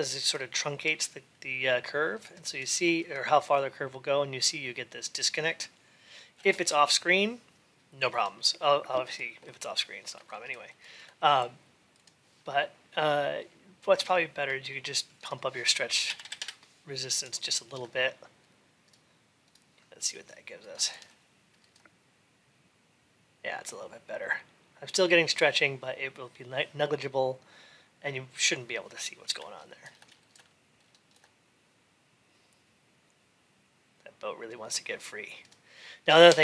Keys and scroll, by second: 16.2 Return.